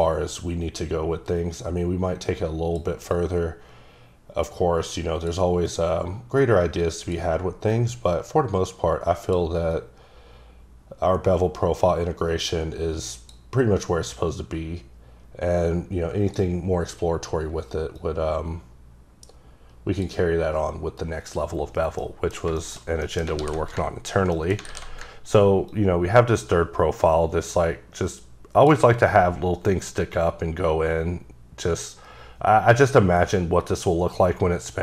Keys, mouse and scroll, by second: 3.1 click, 5.7 click, 7.7 click, 9.7 click, 13.8 click, 18.0 click, 22.0 middle click, 22.4 scroll down 2, 22.6 shift+middle click, 23.4 alt+w, 24.3 ctrl+middle click, 24.7 alt+w, 25.7 ctrl+click.